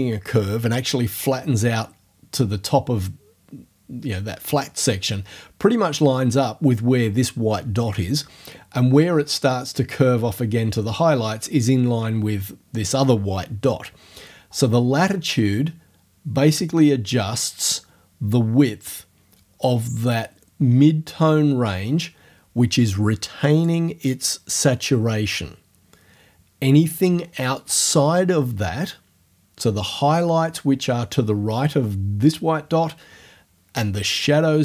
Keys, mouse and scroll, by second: 16.6-23.8 drag.